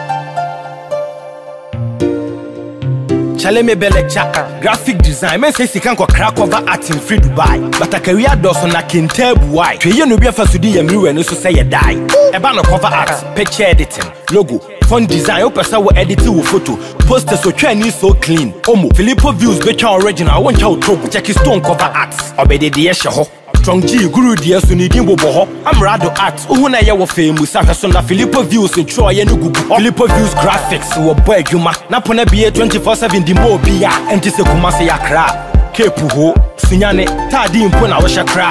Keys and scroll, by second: 14.3 ctrl+=, 16.9 ctrl+z.